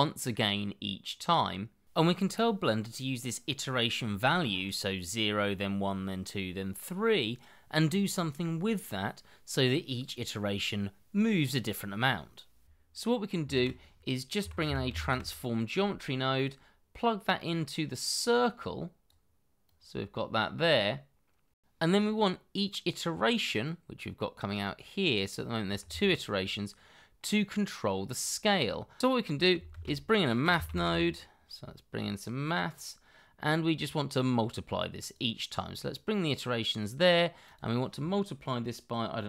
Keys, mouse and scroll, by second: 13.5-15.1 typing, 21.5 scroll down 1, 21.6 shift+middle click, 25.8 Escape, 29.0 Escape, 29.7-30.8 typing.